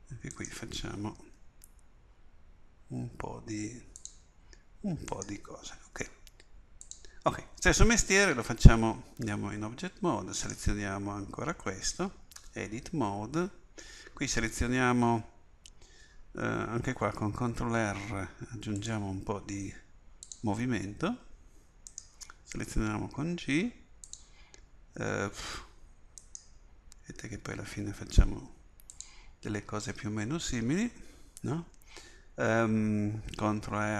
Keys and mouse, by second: 1.4 g, 6.0 g, 9.3 Tab, 10.4-12.4 drag, 12.4 Tab, 12.4-15.7 middle drag, 17.4 ctrl+r, 22.0-24.1 drag, 22.8 g, 26.2-29.0 drag, 27.4 g, 33.7 ctrl+r.